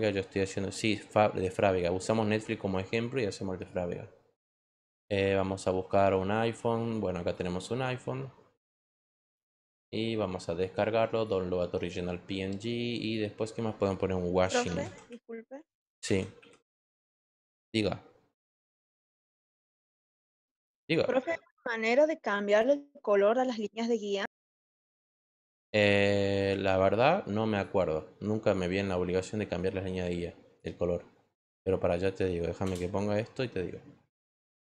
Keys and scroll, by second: 14.0-17.2 typing.